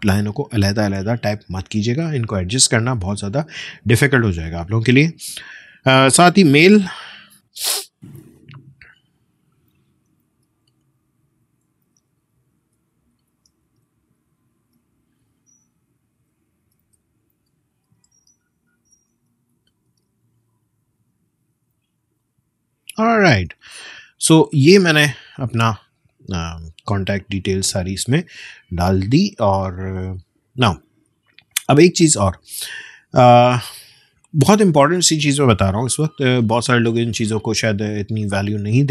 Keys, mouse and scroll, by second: 6.7-7.8 typing, 9.2-14.3 typing, 14.5 Return, 15.3-18.8 typing, 19.8 typing, 22.1 click, 23.5 space, 23.7 click, 24.0 space, 24.4 space, 27.1 click.